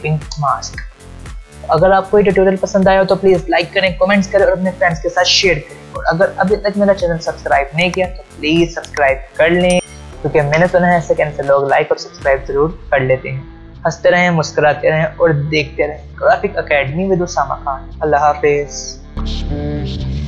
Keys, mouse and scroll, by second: 0.3 click.